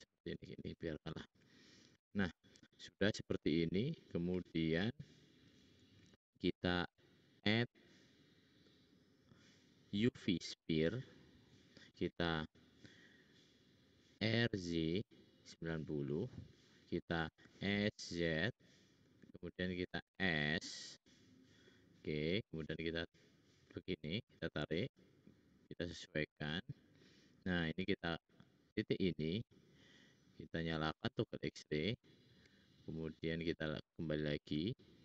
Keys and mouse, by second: 0.1 ctrl+z, 0.4 ctrl+z, 0.6 ctrl+z, 4.2 `, 14.1 r, 16.4 click, 17.3 s, 20.0 s, 21.7 middle click, 22.7-23.8 drag, 23.9 middle click, 27.7-30.4 drag, 32.4 `, 33.0 click, 34.5 g.